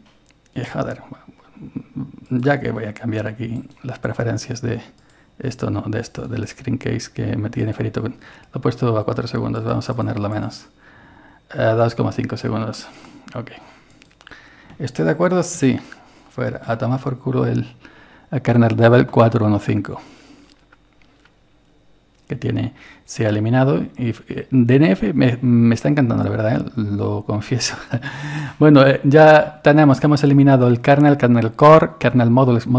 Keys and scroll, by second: 15.6 typing, 16.7 Return, 19.2 typing.